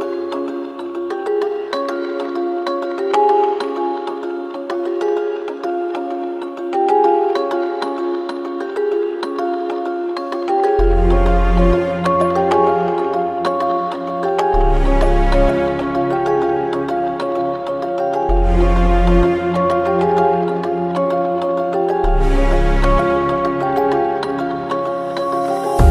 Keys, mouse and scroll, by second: 0.7 click, 2.7 ctrl+g, 5.7 click, 12.3-20.0 drag, 20.4 click, 24.6 scroll up 1.